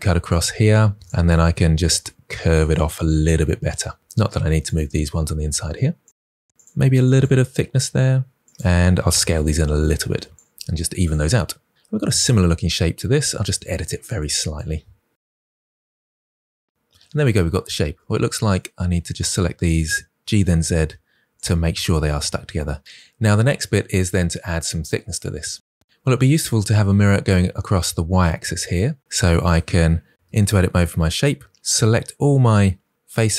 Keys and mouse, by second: 0.2 click, 0.8 1, 1.2 g, 2.5 click, 2.8 click, 3.1 g, 3.3 click, 3.8 g, 4.4 click, 5.7 g, 6.5 click, 7.0 g, 8.3 click, 8.9 s, 9.5 click, 10.4 g, 10.9 click, 13.5-16.9 typing, 13.7 click, 14.9 click, 15.1 click, 15.5 click, 16.0 click, 16.2 click, 16.4 click, 16.7 click, 17.3 Tab, 17.5 Tab, 17.6 Tab, 17.8 Tab, 17.8 Tab, 18.0 Tab, 20.1 g, 20.3 z, 21.2 click, 22.1 Tab, 30.1 Tab, 31.4 3, 32.9 a.